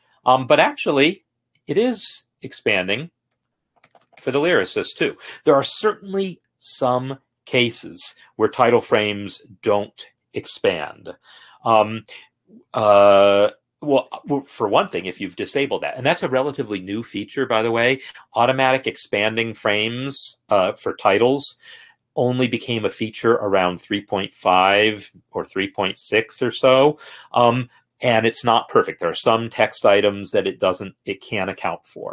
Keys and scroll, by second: 0.6 Escape, 2.8 End, 3.1 Down, 3.6 Return, 4.4 s, 5.3 Return, 5.5 s, 5.6 Return, 5.7 Return, 5.7 s, 5.7 Return, 5.7 s, 6.1 Escape.